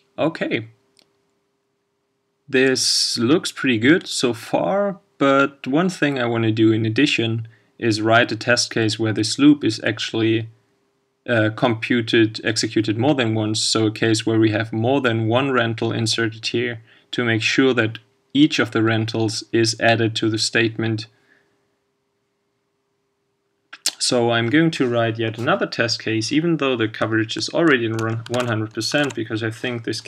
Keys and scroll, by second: 28.3 shift+super+c, 29.0 super+v.